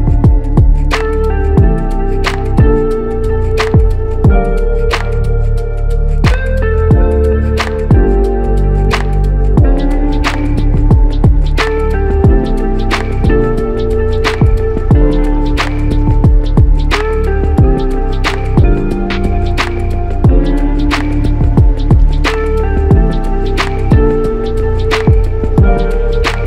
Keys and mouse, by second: 2.4 typing, 2.5 shift+click, 5.3 alt+click, 11.2 shift+click, 17.3 double click, 20.9 alt+click, 24.3 double click.